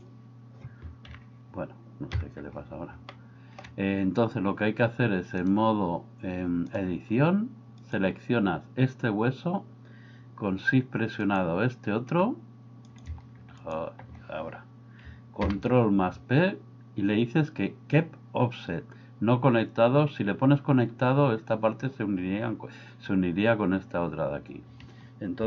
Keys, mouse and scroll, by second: 1.2 KP_1, 2.3 KP_3, 3.1-3.6 shift+middle drag, 5.5-6.8 drag, 15.5 ctrl+p.